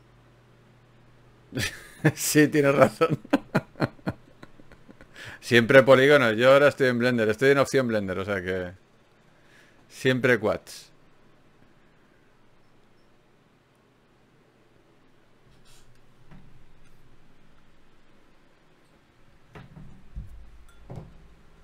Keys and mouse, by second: 3.8 right click, 4.4-8.4 middle drag, 8.6-10.4 drag, 10.4 g, 11.4 click, 11.6 g, 12.8 g, 13.9 g, 14.0 click, 14.6-16.2 middle drag, 19.0-20.9 right drag.